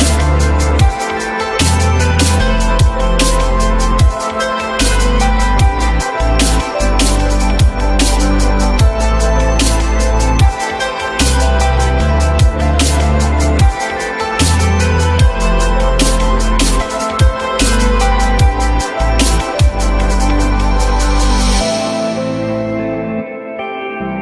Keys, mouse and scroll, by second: 7.0 alt+middle click, 7.8 alt+middle click, 9.4 l.